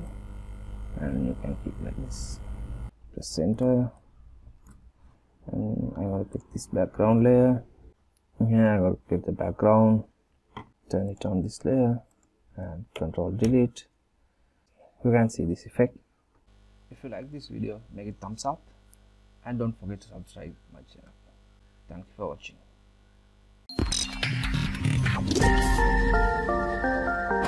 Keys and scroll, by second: 13.1 ctrl+Delete.